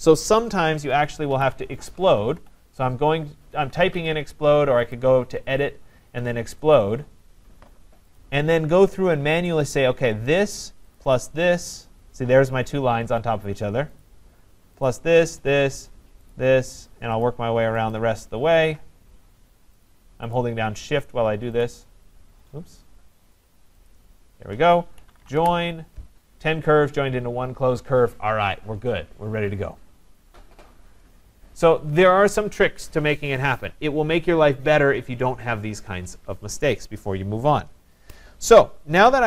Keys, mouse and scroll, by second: 1.1-2.9 typing, 4.0 Escape, 5.0 click, 6.8 click, 8.2 click, 9.5 click, 10.0 click, 11.0 shift+click, 14.0 click, 14.9 click, 15.4 shift+click, 16.3 shift+click, 17.3 shift+click, 17.9 shift+click, 18.2 scroll down 6, 18.9 scroll up 4, 19.8 shift+click, 20.4 shift+click, 21.6-23.0 shift+click, 22.5-23.0 scroll up 4, 23.0 scroll, 23.0 scroll up 5, 23.2 scroll, 23.9 shift+click, 24.8-25.7 typing, 28.7-29.6 typing, 30.2-31.2 scroll, 31.2-34.4 scroll down 10.